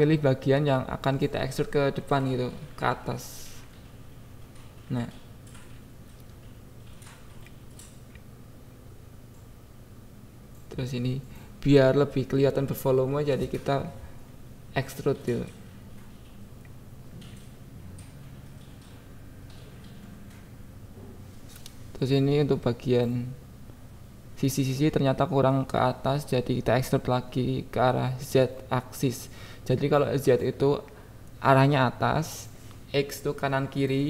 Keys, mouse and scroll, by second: 0.7 shift+click, 1.6-2.6 drag, 2.8 click, 3.1 q, 3.6 a, 4.1 e, 5.0 click, 5.4 KP_7, 6.2 click, 7.0 click, 8.3 shift+click, 8.8 click, 10.1 e, 10.2 Down, 10.6 Down, 10.6 Up, 11.0 click, 11.1 Tab, 11.5 KP_7, 12.2 right click, 12.6 click, 14.2 click, 14.9 KP_7, 15.3 Tab, 16.3 click, 17.6 shift+click, 19.5 shift+click, 20.0 shift+click, 20.4 shift+click, 20.8 click, 22.0 e, 22.1-22.9 Up, 22.9 Tab, 23.4 KP_7, 23.7 Tab, 23.9 Tab, 24.2 click, 25.0 KP_7, 25.8 click, 27.0 click, 27.1 click, 27.2 click, 28.3 click, 29.3 click, 30.0 click, 30.6 KP_1, 31.0 KP_7, 31.6 click.